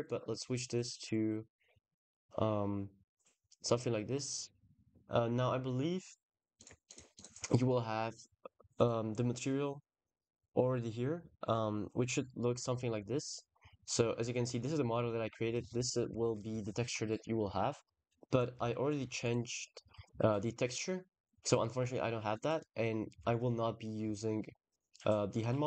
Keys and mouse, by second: 0.0 click, 1.7-2.7 drag, 6.4 click, 25.5 click.